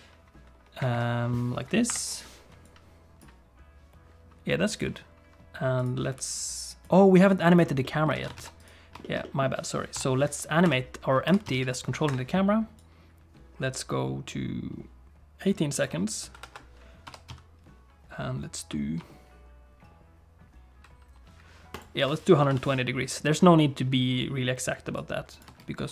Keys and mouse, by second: 0.9 shift+click, 2.1 F12, 5.8 click, 6.4 click, 7.4 click, 7.8 middle click, 8.2 alt+a, 8.4 ctrl+s, 8.6 click, 9.0 shift+middle click, 9.2 middle click, 9.9 i, 11.3 r, 12.8-15.9 drag, 16.4 KP_7, 17.1 r, 22.4 i, 25.0 click, 25.5 space.